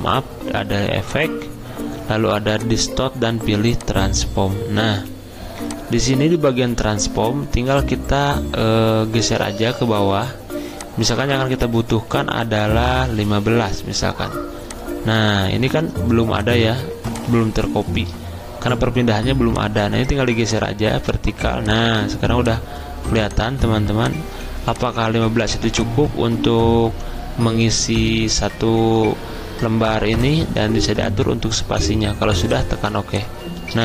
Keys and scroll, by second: 13.1-13.6 typing.